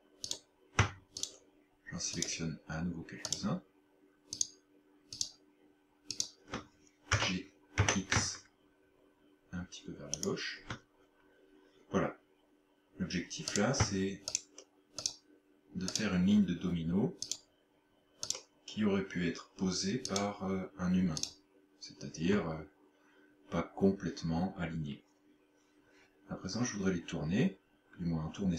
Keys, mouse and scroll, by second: 0.3 right click, 1.3 shift+right click, 2.2 shift+right click, 3.3 shift+right click, 4.4 shift+right click, 5.2 shift+right click, 6.2 shift+right click, 7.1 g, 10.3 shift+click, 13.6 right click, 14.4 shift+right click, 15.1 shift+right click, 15.9 shift+right click, 17.3 shift+right click, 18.3 shift+right click, 20.1 shift+right click, 21.2 shift+right click.